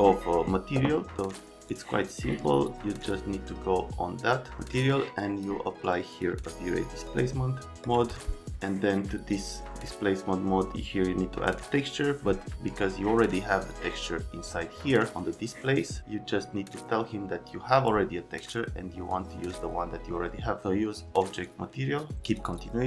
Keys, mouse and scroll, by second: 1.7 click, 2.9 click, 4.9 click, 6.1 click, 7.0 click, 7.8 click, 13.7 click, 19.4 click, 21.3 click, 22.2 click.